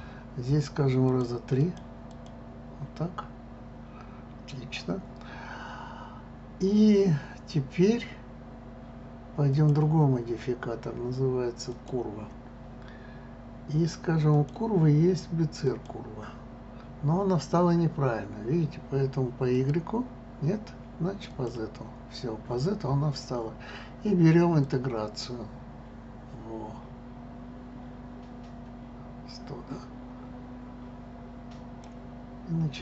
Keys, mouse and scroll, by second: 1.1-2.5 drag, 9.5-12.5 drag, 14.3-17.3 drag, 19.5 click, 21.3 click, 24.6-27.6 drag.